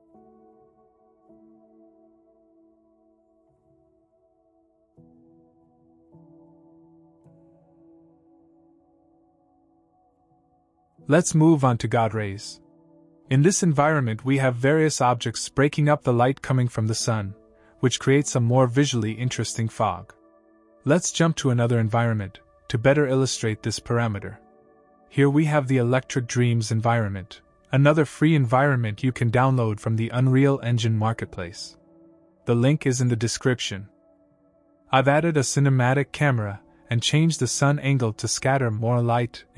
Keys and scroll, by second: 0.7 d, 2.0 w, 2.3 d, 3.0 w, 4.9-6.4 typing, 7.8-9.9 typing.